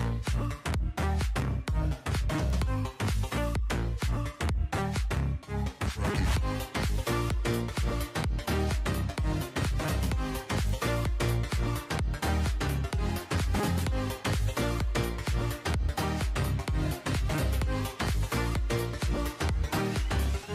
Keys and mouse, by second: 0.6 click, 1.4 right click, 1.6 KP_7, 1.9 g, 3.1 middle click, 3.7 right click, 4.0 KP_7, 4.3 g, 5.7 right click, 5.9 KP_7, 6.2 g, 8.2 KP_7, 8.5 g, 9.1 middle click, 9.3 drag, 9.6-10.5 middle drag, 10.5 right drag, 10.8 KP_7, 11.1 g, 11.8 middle click, 12.0 right click, 12.3 KP_7, 12.6 g, 13.6 KP_7, 13.8 g, 15.9 right click, 16.1 KP_7, 16.4 g, 17.8 click, 18.2 KP_7, 18.5 g.